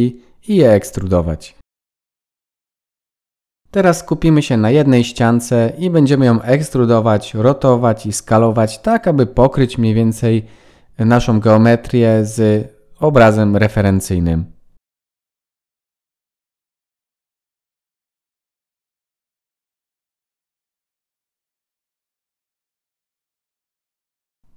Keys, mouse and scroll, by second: 0.2 click, 1.6 KP_1, 2.6 e, 3.6 middle click, 5.3 click, 6.4 KP_1, 7.3-8.0 scroll up 3, 8.4-9.4 scroll up 2, 9.9 shift+middle click, 11.1 s, 12.9 g, 14.9-23.8 typing, 17.9 shift+middle click, 22.5 shift+middle click, 24.2 scroll down 3, 24.4 middle click.